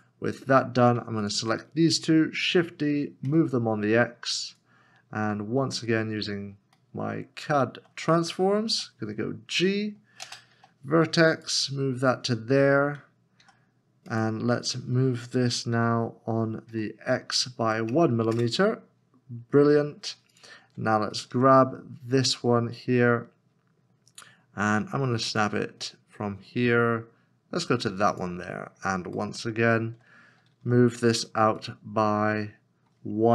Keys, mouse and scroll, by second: 1.2 shift+click, 2.4 shift+d, 5.0 x, 5.2-6.2 scroll up 1, 6.9 shift+middle click, 8.7 g, 10.2 space, 10.5 v, 13.4 v, 14.2 g, 15.7 g, 16.7 x, 17.7 1, 18.3 Return, 19.0 scroll down 1, 21.3 g, 28.6 g, 28.8 scroll up 1, 29.3 shift+middle click, 30.6 g.